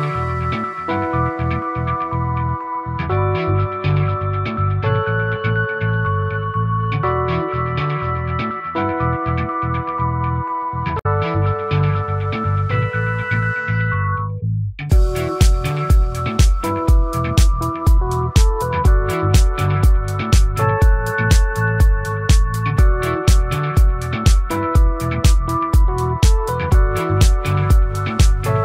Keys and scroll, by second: 19.1 ctrl+-.